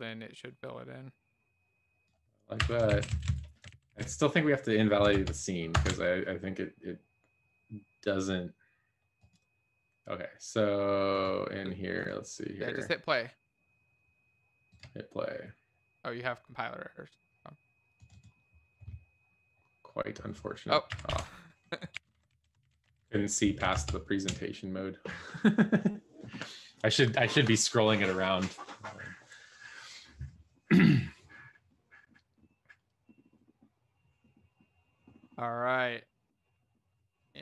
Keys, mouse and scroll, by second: 3.0 ctrl+s, 3.0 Down, 3.2 Down, 4.3 ctrl+s, 20.8 Delete, 21.0 End, 21.9 ;, 22.0 BackSpace, 22.8 ctrl+s, 22.9 Down.